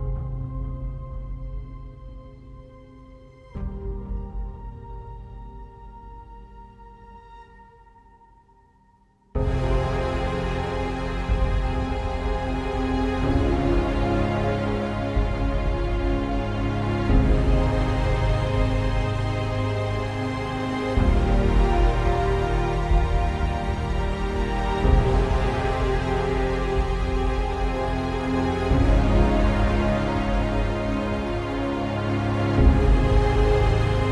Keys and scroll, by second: 2.4 ctrl+alt+w, 2.6 Return.